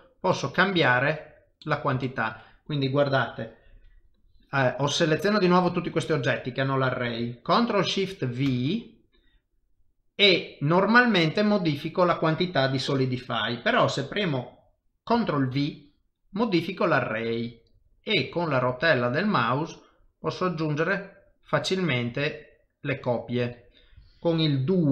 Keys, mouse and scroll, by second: 0.3 middle click, 0.3 scroll down 6, 0.8 shift+middle click, 1.3 scroll down 2, 1.6 middle click, 2.0 shift+middle click, 4.8 click, 5.8 shift+middle click, 6.2 middle click, 8.5 ctrl+shift+v.